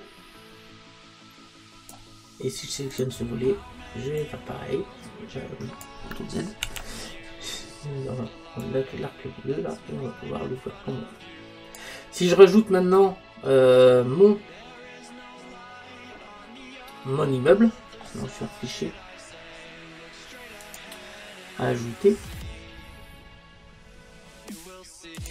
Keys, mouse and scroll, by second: 3.0-5.9 right drag, 4.2 click, 6.8 ctrl+z, 8.7 click, 12.5-15.0 middle drag, 20.7 click.